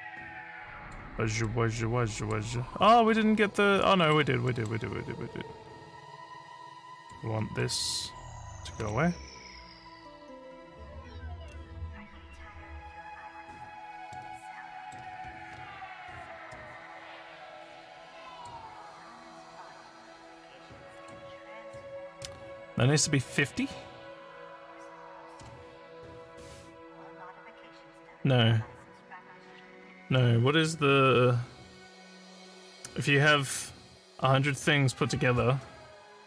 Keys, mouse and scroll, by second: 0.0 click, 1.4 middle click, 2.2 click, 2.6 scroll up 1, 3.8 middle click, 4.5 middle click, 7.0 click, 14.1 middle click, 15.5 ctrl+scroll up 4, 16.1 ctrl+scroll up 1, 18.4 click, 19.2 click, 21.0 ctrl+click, 21.7 ctrl+click.